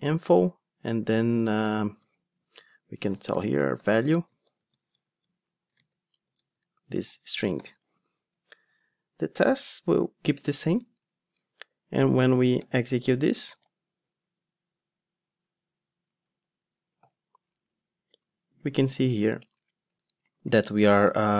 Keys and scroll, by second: 7.5 alt+super+l.